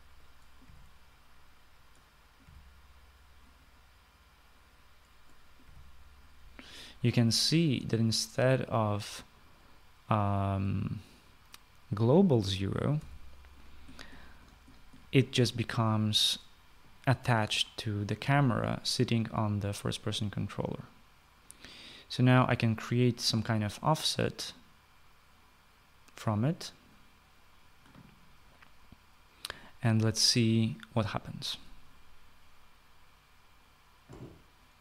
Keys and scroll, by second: 1.2 typing, 3.0 typing, 6.2 typing, 13.4-14.1 typing.